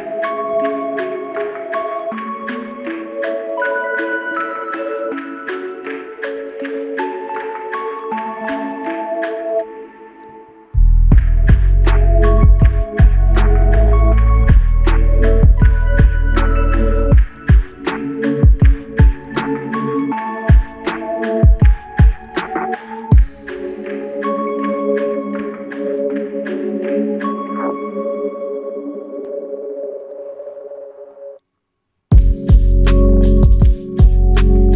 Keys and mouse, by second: 0.7 typing, 2.9 double click, 7.1 alt+click, 9.5 shift+click, 9.9 shift+double click, 11.9 shift+click, 15.9-17.2 typing, 30.9 alt+click.